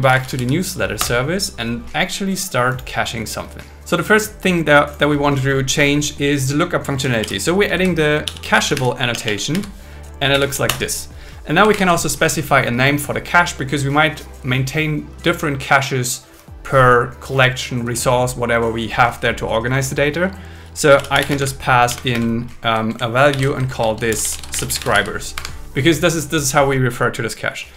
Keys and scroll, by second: 5.8 Return, 7.2 alt+l, 7.7 shift+c, 9.1 BackSpace, 10.3 Down, 10.7 Return, 11.7 shift+8, 21.3 space, 21.9 shift+0, 22.1 shift+space, 23.3 alt+5, 23.7 shift+2, 25.4 Escape.